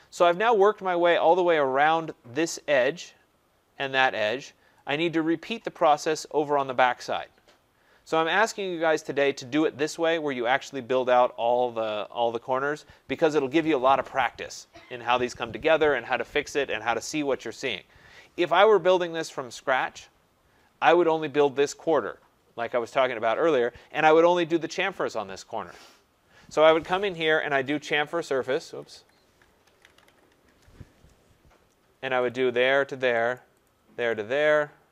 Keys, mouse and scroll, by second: 0.6 right click, 0.9 scroll, 2.2 scroll, 5.7 right click, 9.4 right click, 12.6 middle click, 12.7 middle click, 12.7 middle click, 18.0 scroll, 19.1 right click, 19.5-20.5 scroll, 20.5 scroll, 20.7 middle click, 22.1 middle click, 22.2 middle click, 23.3 middle click, 23.4 middle click, 27.5 typing, 28.5 Escape, 28.7-30.1 typing, 30.4 Return, 31.4-33.8 typing.